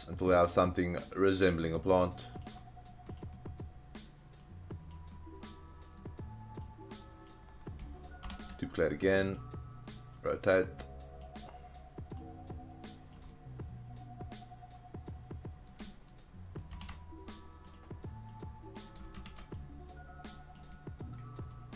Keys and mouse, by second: 0.6-1.5 drag, 1.7-2.2 middle drag, 2.4 click, 2.6 middle drag, 3.4 middle click, 4.5 click, 5.1-6.0 middle drag, 6.7 click, 8.2 shift+d, 9.3 click, 10.2-11.2 drag, 12.2-13.1 drag, 13.3-15.7 middle drag, 15.9 shift+middle click, 16.7 shift+d, 17.7 click, 18.4-18.8 drag, 19.2 ctrl+z, 19.5-20.5 drag, 20.7-21.2 middle drag, 21.5-21.7 middle drag.